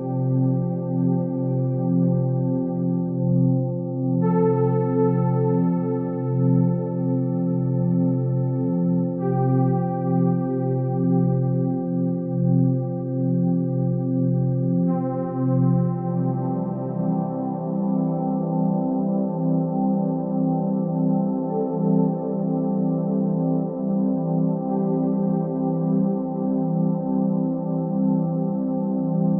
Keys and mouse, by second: 0.0 shift+middle click, 0.5 2, 1.0 g, 3.4 Tab, 3.8 alt+z, 4.8-5.7 middle drag, 6.2-7.9 middle drag, 8.5-9.5 shift+middle drag, 10.9 click, 12.2 click, 15.8 click, 18.8 click, 19.7 shift+a, 22.1 g, 23.0 s, 25.7 click, 26.8-29.3 drag, 28.7 0.